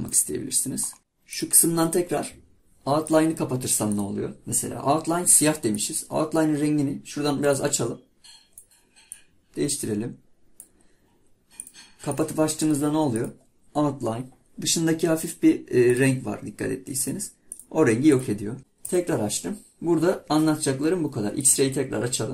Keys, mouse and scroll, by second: 0.1-1.3 middle drag, 1.3-4.5 drag, 15.9-18.6 drag, 18.9-22.0 drag.